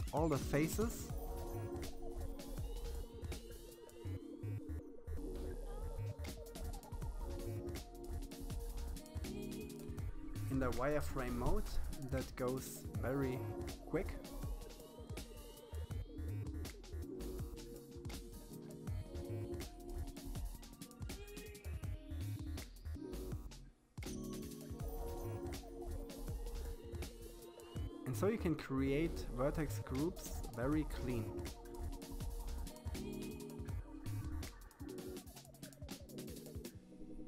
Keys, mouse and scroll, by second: 7.6-8.9 scroll up 2, 8.9 c, 32.4-33.9 shift+middle drag, 34.4 c.